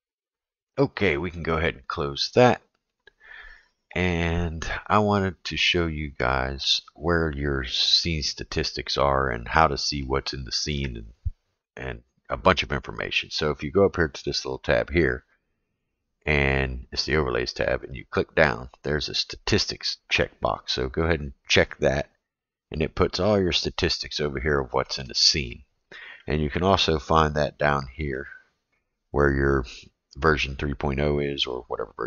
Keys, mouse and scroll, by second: 15.7 click, 17.7-22.4 drag, 27.4-28.3 right drag.